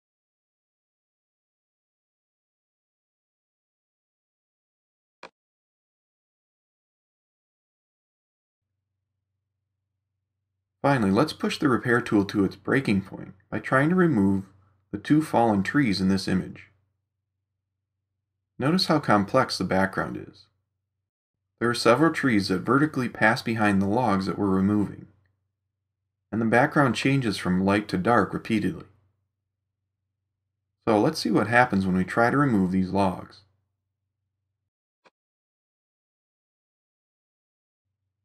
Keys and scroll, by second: 7.6 ].